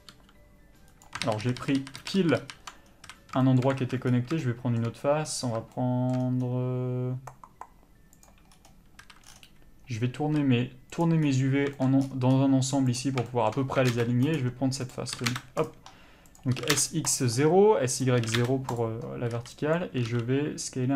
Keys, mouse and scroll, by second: 0.1 g, 1.2 ctrl+z, 3.0 a, 3.8 alt+a, 8.2 click, 9.0 a, 10.2 r, 11.0 click, 13.8 s, 14.9 click, 15.1 s, 15.6 click, 16.5 s, 17.1 click, 18.2 s, 18.8 click, 19.7 b, 20.1 s.